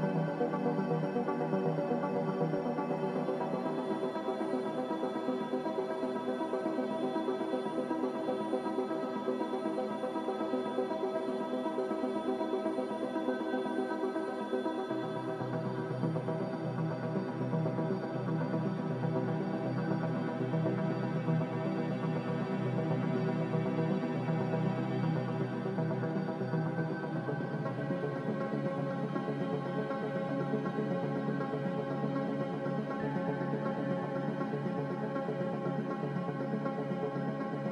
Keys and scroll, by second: 7.5 1, 21.7 z, 24.6-25.5 typing, 28.1 typing, 30.4-31.2 typing, 33.5-34.2 typing, 37.3 F9.